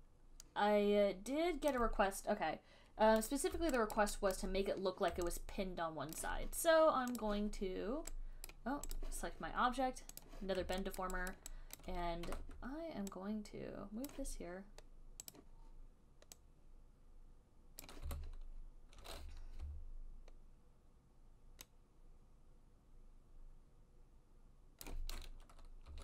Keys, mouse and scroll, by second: 2.0 alt+click, 4.2 alt+right click, 4.6 alt+click, 6.4 alt+click, 7.5 click, 8.7 click, 9.3 right click, 9.3 click, 10.4 click, 11.3 alt+right click, 11.6 right click, 12.1 alt+click, 12.5 w, 14.4 click, 15.6 click, 16.3 alt+click, 18.0 click, 18.2 e, 19.9-25.0 j, 20.8 j, 21.2-23.3 drag, 25.0 click, 25.1 j.